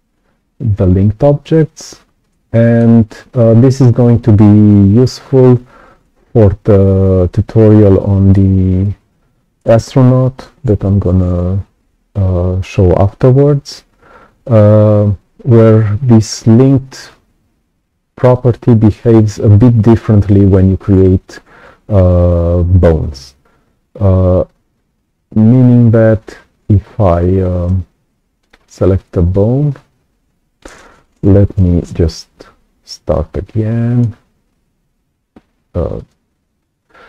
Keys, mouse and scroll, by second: 1.6-1.9 scroll down 2, 2.4 right click, 17.0 click, 28.4 click.